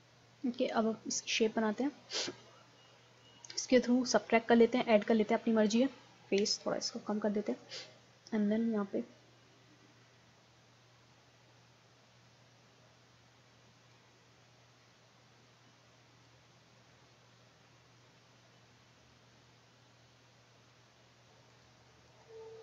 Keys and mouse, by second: 0.6-1.7 middle drag, 1.7-3.6 drag, 5.1-7.0 drag, 6.4 f, 7.6-9.4 drag, 13.8 middle click, 13.9-15.8 drag, 15.7 middle click, 17.4-19.1 middle drag, 19.1-20.8 drag, 21.3 ctrl+z, 21.5-22.6 drag.